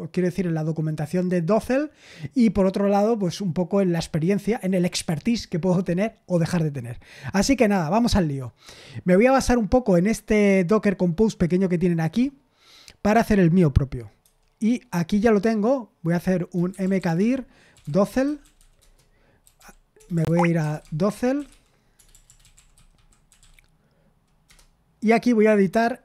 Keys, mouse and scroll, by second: 7.0-8.5 scroll down 2, 14.2 super+8, 16.3-23.8 typing, 24.4 Return.